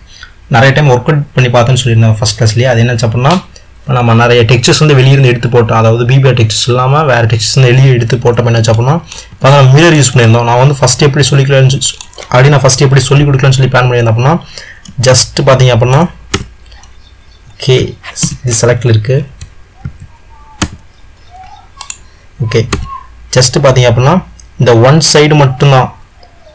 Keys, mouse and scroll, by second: 16.5 Tab, 18.3 BackSpace, 20.0 s.